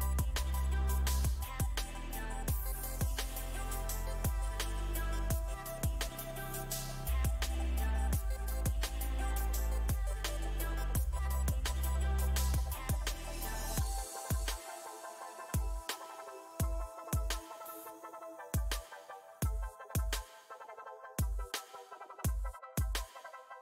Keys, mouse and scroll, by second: 1.2 space, 1.6-4.7 drag, 7.2 space, 7.6 f, 8.3-11.3 drag, 12.3 shift+click, 13.2-14.3 middle drag, 14.3 f, 14.9 middle click, 15.7-17.3 shift+drag, 17.3-18.5 middle drag, 18.5 shift+c, 19.1 f, 20.2 f, 20.9 click, 21.8 middle click, 22.4 click, 23.2-23.6 middle drag.